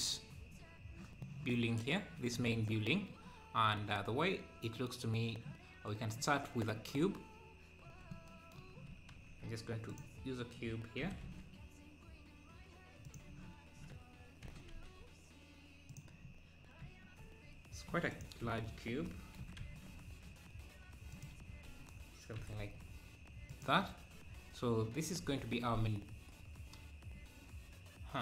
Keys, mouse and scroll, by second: 7.8 KP_7, 9.2 shift+a, 11.0 g, 14.5 g, 16.3 scroll up 3, 17.2 s, 18.4 KP_7, 19.4 g, 25.1-25.4 scroll up 2.